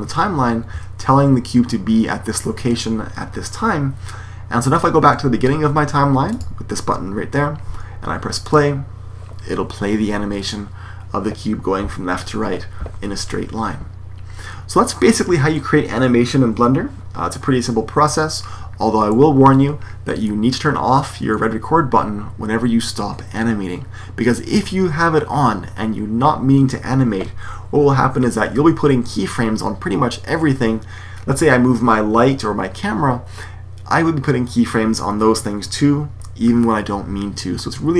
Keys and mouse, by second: 6.2-8.2 drag, 8.3 click, 11.7 Escape.